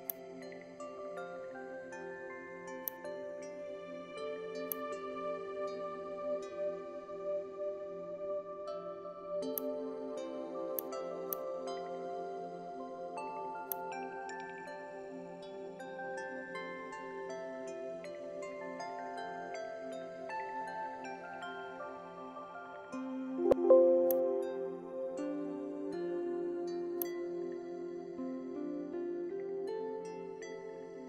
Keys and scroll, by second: 23.4 alt+space.